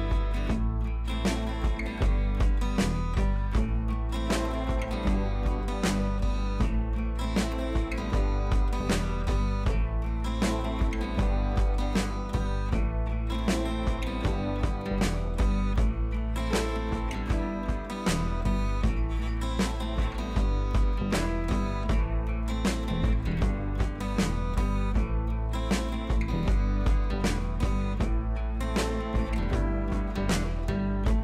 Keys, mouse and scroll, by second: 4.6 scroll down 1, 6.4 scroll down 1, 9.2 scroll up 1, 9.5 click, 10.0 ctrl+t, 11.0-13.2 shift+drag, 13.8 ctrl+t, 14.6-17.2 shift+drag, 17.2 ctrl+z, 17.7 click, 18.3 click, 19.1 scroll up 1, 20.7 click, 23.3 ctrl+a, 24.6 ctrl+c, 25.0 click, 26.2 ctrl+v, 28.2 click.